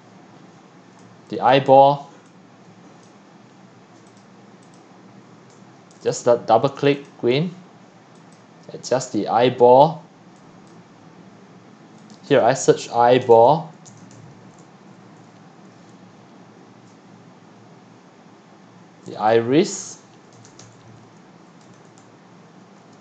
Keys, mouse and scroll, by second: 0.3 middle click, 0.3 scroll, 0.4-0.9 scroll up 4, 1.5 click, 1.8-2.2 scroll up 2, 3.1-4.2 drag, 4.7 click, 5.6 q, 6.0 click, 6.2 click, 7.1 click, 8.3-13.0 drag, 12.7-14.8 typing, 19.7 click, 20.1-23.0 typing.